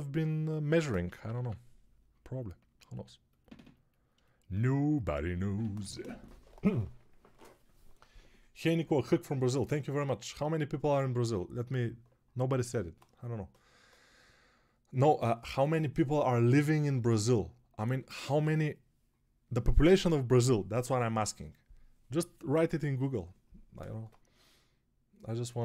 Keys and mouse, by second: 1.1 p.